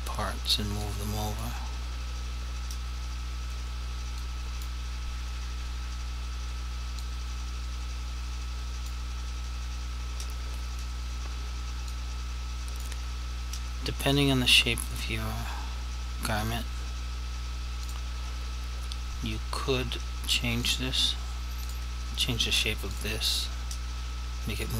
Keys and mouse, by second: 1.0 click, 4.2 click, 7.2 click, 11.9 click, 15.1 right click, 17.9 right click, 17.9 click, 21.7 shift+click, 23.0 shift+click, 24.6 click.